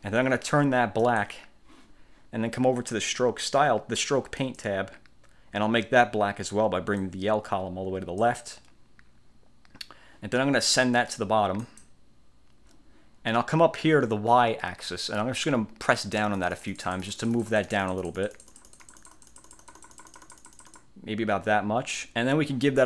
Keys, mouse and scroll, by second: 1.1 click, 4.5 click, 7.1-8.5 drag, 11.7 click, 16.5-21.1 drag.